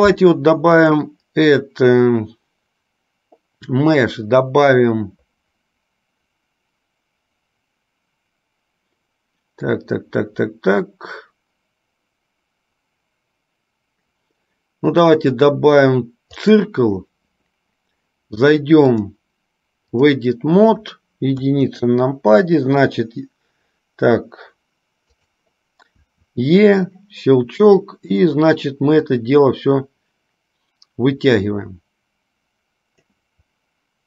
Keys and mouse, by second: 0.9-16.9 drag, 19.1-20.4 drag, 25.4 click, 28.3 click, 29.1-33.3 drag.